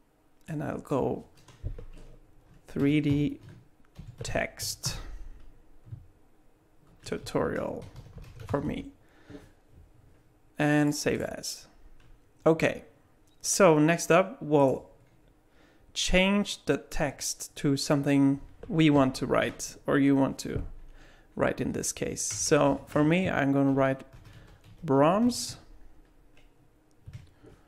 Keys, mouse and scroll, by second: 14.6 click, 17.0 Tab, 22.3-25.2 typing, 27.1 Tab.